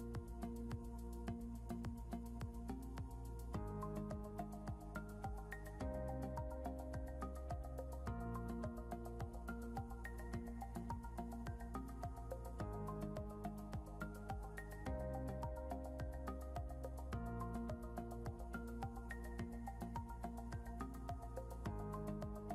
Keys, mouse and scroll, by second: 1.7 scroll down 2, 3.5 scroll up 1, 4.0 click, 7.4 click, 9.7 click, 11.9 ctrl+l, 13.8 click, 18.3 scroll down 1, 19.2 scroll up 2, 20.7 click.